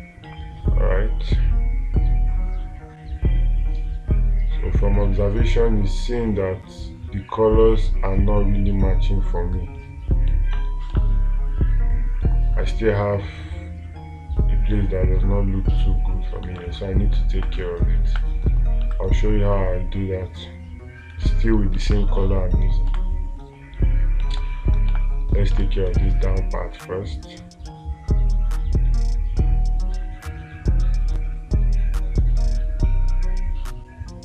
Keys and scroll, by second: 11.4 space, 17.1 space, 24.8 space, 26.1 space.